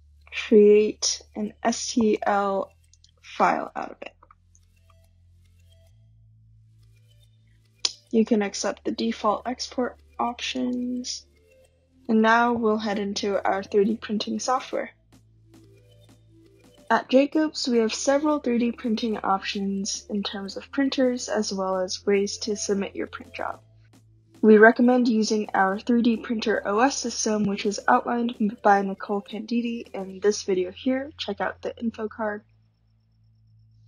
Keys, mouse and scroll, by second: 0.5 scroll, 2.3 click, 3.1 click, 4.3 click, 4.6-6.8 typing, 8.2 click, 10.8 click.